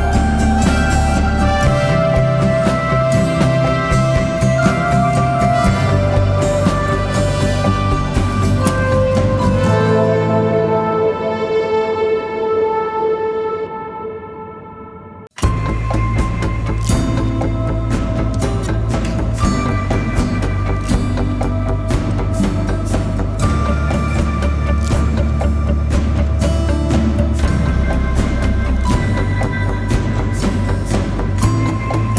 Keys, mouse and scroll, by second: 0.0 typing, 0.5 double click, 7.9 alt+click, 12.8-14.4 typing, 25.5 typing, 31.9-32.1 typing.